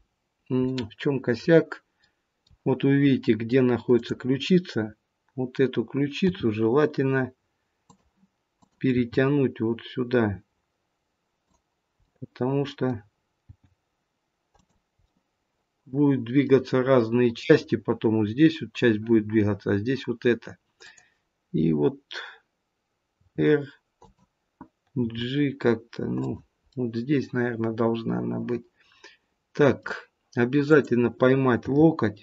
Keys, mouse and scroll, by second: 0.6 middle click, 2.0 middle click, 3.9 click, 6.1 g, 8.5 click, 9.3 g, 12.0 middle click, 13.4 g, 15.0 middle click, 20.8 click, 23.2 r, 25.0 g, 26.7 middle click, 30.6 click, 31.6 g.